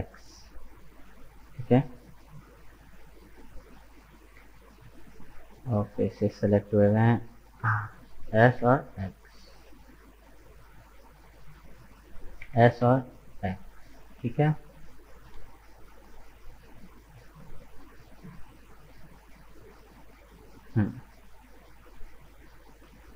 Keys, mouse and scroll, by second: 1.6 middle click, 2.6 KP_1, 4.2 alt+right click, 6.1-7.4 drag, 7.4 alt+right click, 8.3 s, 11.7 alt+right click, 12.4 s, 14.3 middle click, 15.1-15.4 scroll up 2, 16.2 right click, 16.6-18.6 middle drag, 18.6-19.0 scroll up 3, 19.0 right click, 19.6-22.2 middle drag, 22.2 right click, 22.6 middle click.